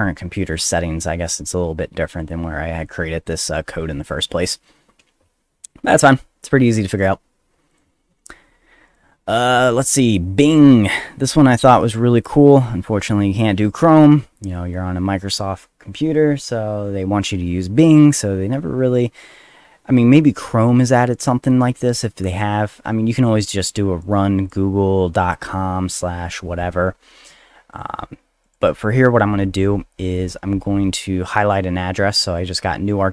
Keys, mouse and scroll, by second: 2.8 click, 4.4 click, 7.0 middle click, 7.0 scroll down 1, 7.7 click, 8.0 middle click, 8.0 scroll down 1, 8.5 middle click, 8.5-8.9 scroll up 1, 8.9 click, 24.0 click, 27.7 click, 28.4 click, 28.6 click, 32.4-33.1 drag.